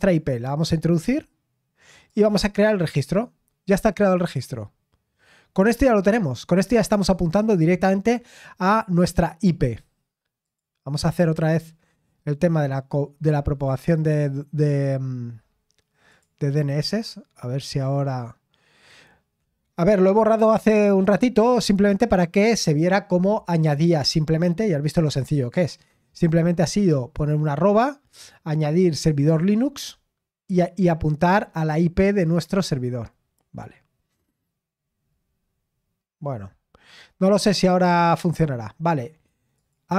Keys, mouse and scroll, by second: 2.1 click, 10.4 click, 11.3-11.9 scroll down 1, 11.9-13.5 scroll up 2, 13.5-14.0 scroll down 2, 14.0-16.0 scroll up 2, 16.0 scroll up 1, 16.1-31.3 drag, 31.3-32.2 scroll up 2, 32.2-35.3 drag, 35.3-35.7 scroll up 2, 35.7-36.8 scroll down 1, 36.8-39.5 scroll up 1, 39.5 click.